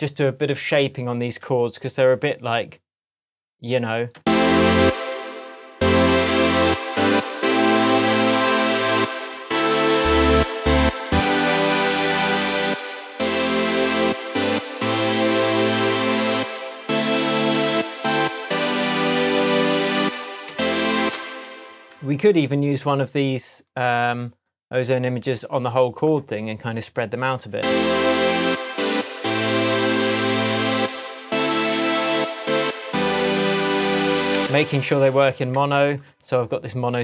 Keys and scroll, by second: 4.1 space, 9.9 super+z, 11.1 shift+super+z, 19.9 space, 27.5 space, 34.3 space.